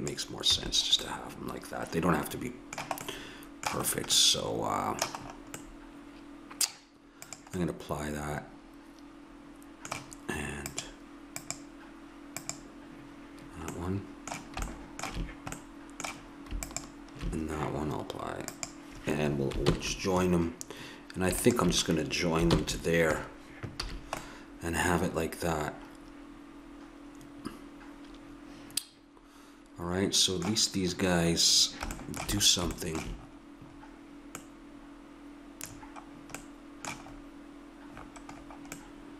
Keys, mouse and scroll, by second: 0.6 a, 7.2-8.8 drag, 8.8 middle click, 10.7-13.7 drag, 13.7 middle click, 16.6-18.0 drag, 19.6 ctrl+j, 22.5 ctrl+j, 23.9 a, 31.0-32.1 middle drag, 35.9 middle click, 39.0-39.1 middle drag.